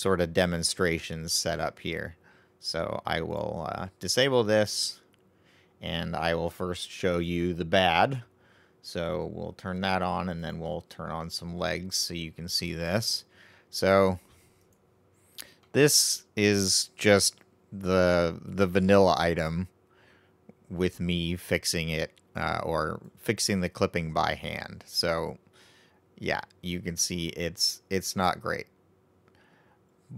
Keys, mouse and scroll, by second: 3.5 click, 4.3-7.4 right drag, 7.4 click, 10.7 click, 12.5-14.9 middle drag, 14.9 right click, 15.6-18.6 middle drag, 22.8 right click, 23.0-23.6 scroll up 3, 23.6-24.1 scroll down 1, 24.1-27.1 middle drag, 29.7-30.1 scroll down 2.